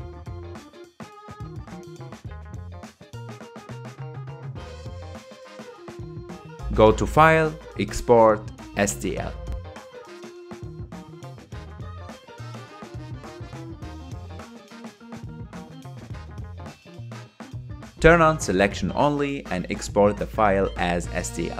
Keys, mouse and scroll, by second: 0.1 KP_Decimal, 2.4 ctrl+a, 4.2-5.0 scroll down 3, 5.0 click, 5.3-6.0 scroll up 3, 6.0-6.9 middle drag, 6.9 g, 8.5-11.6 drag.